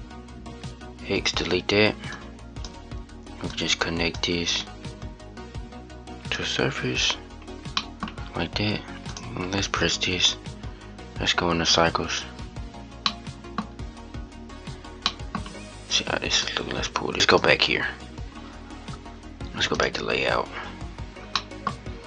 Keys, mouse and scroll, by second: 0.2 x, 1.8-6.2 drag, 9.1-12.3 drag, 13.3-14.1 middle drag, 14.1-14.7 scroll up 1, 14.7-15.4 scroll down 1, 15.4 middle click, 16.3-17.5 drag, 20.6-21.1 scroll down 4, 21.1-21.5 middle drag, 21.5-22.0 scroll up 2.